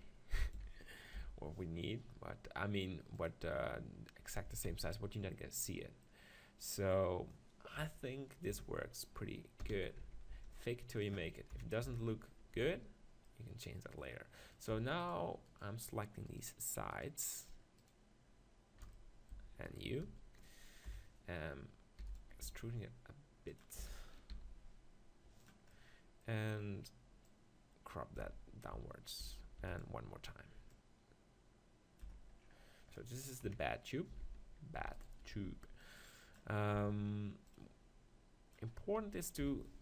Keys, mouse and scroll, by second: 0.5-2.4 drag, 0.7 s, 3.2-5.2 drag, 4.4 Tab, 4.7 z, 7.8 KP_1, 8.5 Tab, 9.6 f, 10.0 Tab, 10.3 z, 10.6-12.6 middle drag, 11.5 KP_7, 11.8 Tab, 12.6 z, 13.3-14.7 middle drag, 19.3 click, 20.8 KP_7, 22.0 e, 22.4 s, 23.6 click, 23.6 right click, 24.0 s, 24.1-29.1 drag, 28.7 Tab, 29.2 Tab, 29.6 e, 30.7-32.6 drag, 32.1 Tab, 32.6 middle click, 33.4 KP_7, 34.1 Tab, 34.7 z, 35.0-37.0 drag, 35.3 b, 36.8 b, 39.4 s.